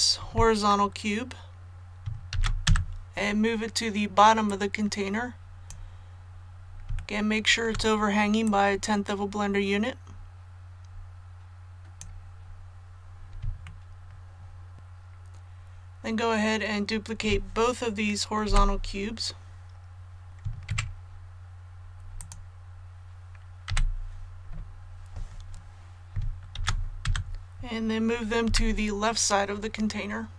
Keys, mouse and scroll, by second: 2.3 shift+d, 4.4 click, 4.5 scroll up 1, 5.7-6.1 scroll up 1, 7.0 shift+middle click, 7.4 shift+scroll up 1, 8.5-12.3 drag, 12.3 scroll down 1, 13.6-14.7 shift+middle drag, 14.7-18.4 scroll down 1, 20.7 Tab, 22.2 click, 26.5 shift+d, 28.4 KP_1.